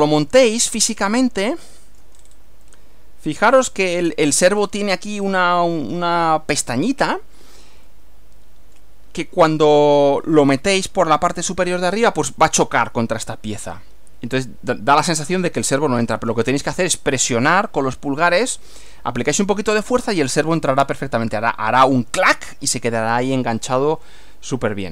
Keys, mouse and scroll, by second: 0.4 middle click, 1.6-2.2 shift+middle drag, 2.2-2.5 shift+scroll up 1, 2.7-4.6 middle drag, 4.6 shift+scroll up 1, 7.9-9.0 shift+middle drag, 23.6-24.9 middle drag.